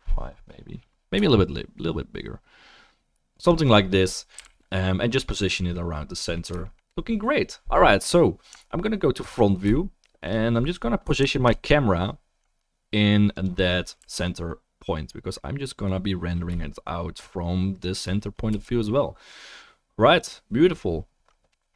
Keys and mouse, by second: 4.3 g, 5.2-5.7 drag, 5.7-8.8 middle drag, 5.7-9.0 right drag, 9.0 alt+middle click, 9.1-9.7 alt+right drag, 9.7-11.5 shift+middle drag, 11.4 ctrl+alt+KP_0, 11.5-14.3 ctrl+alt+drag, 14.0 g, 18.5-20.2 middle drag, 18.5-21.7 right drag, 18.5 g.